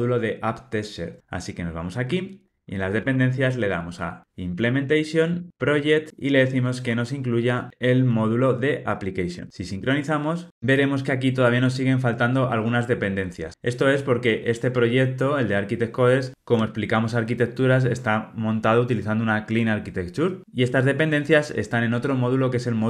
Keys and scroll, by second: 3.0 Tab, 6.2 Return.